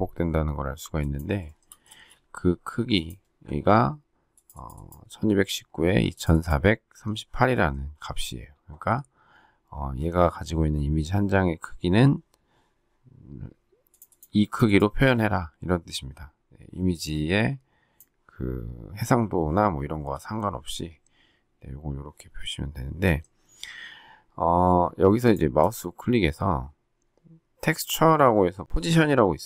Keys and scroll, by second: 1.8 shift+space.